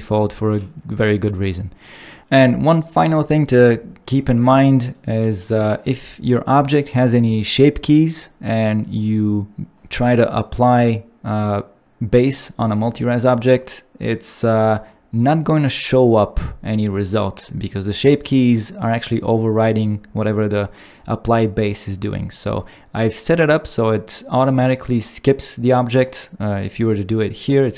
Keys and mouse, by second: 4.8 click, 20.2 click.